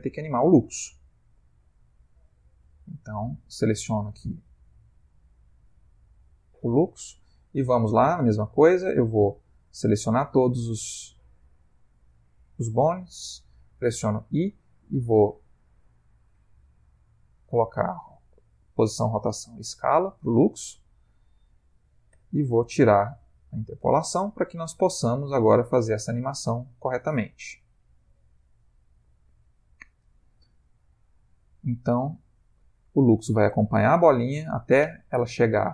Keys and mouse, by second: 3.4 click, 4.6 ctrl+Tab, 5.8 click, 7.1 click, 9.8 a, 10.5 ctrl+middle click, 14.3 i, 22.1 t, 25.7 click, 30.6 Right, 31.4 Right, 31.8 Left, 32.0 Left, 32.2 Left, 32.4 Left, 32.7 Left, 32.9 Right, 33.1 Right, 33.3 Right, 33.7 Right, 33.9 Right, 34.3 Left, 34.5 Left, 34.7 Left, 35.0 Left, 35.2 Left, 35.4-35.7 Left.